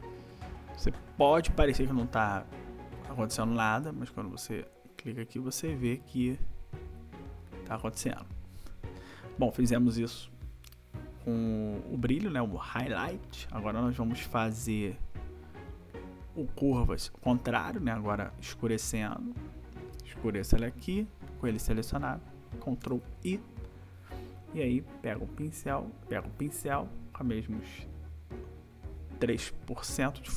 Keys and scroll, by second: 22.9 ctrl+i.